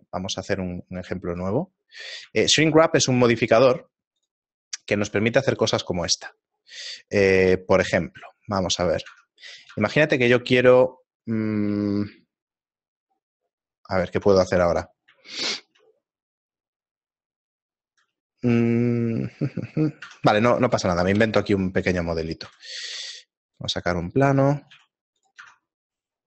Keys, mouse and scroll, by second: 0.8 right click, 1.0 right click, 1.3 x, 2.0 middle click, 2.0-2.9 scroll down 4, 2.4 shift+a, 5.1 s, 5.9 shift+middle click, 7.4 middle click, 9.1 Tab, 9.7 Tab, 12.0 shift+middle click, 14.9 middle click, 15.3 shift+middle click, 20.1 Tab, 21.6 Tab, 21.6 KP_7, 22.5 z, 22.9 shift+a, 24.0 middle click, 24.4 scroll down 2, 24.8 s, 25.5 Tab, 25.8 right click.